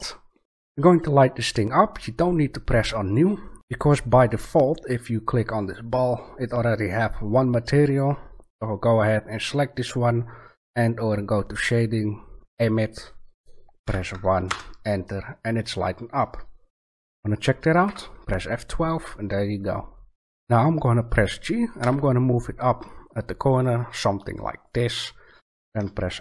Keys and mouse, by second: 0.0 Escape, 5.6-7.4 middle drag, 12.5-14.2 drag, 14.2 middle click, 20.3 ctrl+z, 21.8 g, 24.7 click.